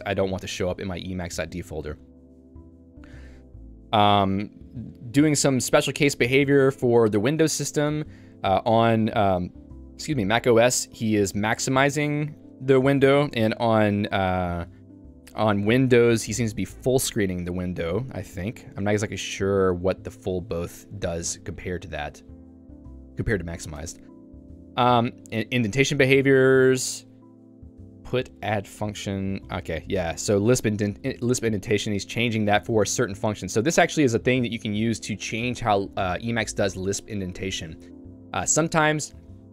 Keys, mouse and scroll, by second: 0.3 j, 6.7 shift+v, 7.9 Escape, 8.4 l, 9.1 k, 9.4-10.5 l, 13.1 j, 13.4-14.4 h, 15.6-16.7 l, 20.2 l, 20.4 l, 21.3 Escape, 21.9 h, 22.6 Escape, 23.0 k, 23.8 Escape, 24.0 j, 27.5-39.5 typing.